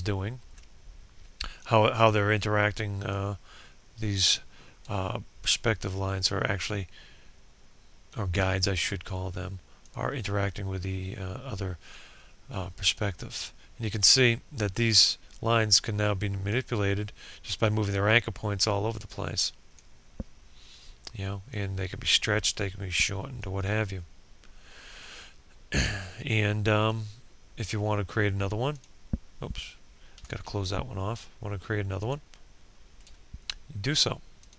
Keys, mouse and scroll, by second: 27.3 ctrl+z, 29.2 click, 31.5 shift+click, 33.5 click.